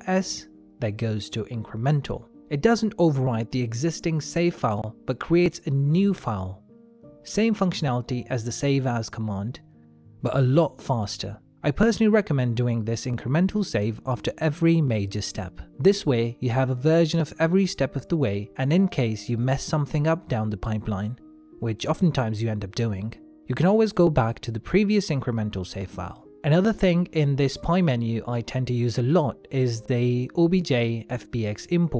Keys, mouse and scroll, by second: 2.5 ctrl+s, 14.5 shift+middle click, 15.6 ctrl+s, 28.0 ctrl+s.